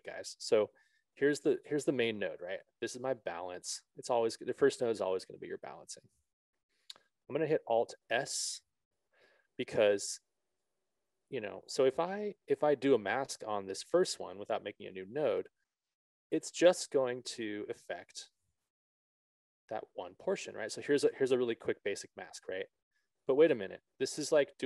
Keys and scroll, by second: 9.4 alt+s, 14.7 BackSpace.